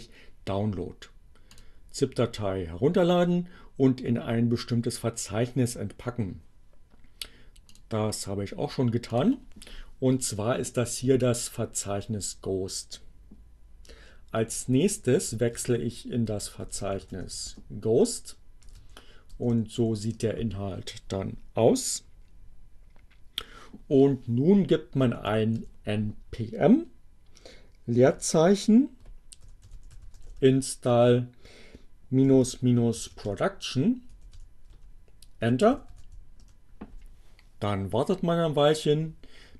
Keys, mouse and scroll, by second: 1.3 click, 7.0 click, 8.7 click, 14.3-18.1 typing, 19.3-20.2 typing, 24.5-25.5 typing, 27.4 space, 27.6 i, 29.5-30.6 typing, 32.1-33.7 typing, 34.8-35.9 typing, 36.3 Return.